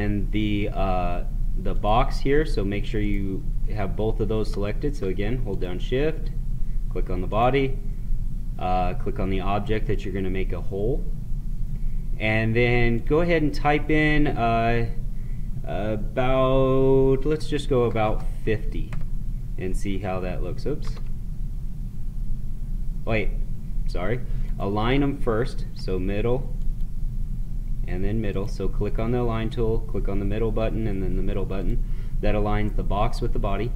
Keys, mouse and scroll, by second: 12.9 click, 20.6 ctrl+z, 24.6 click, 31.5 click.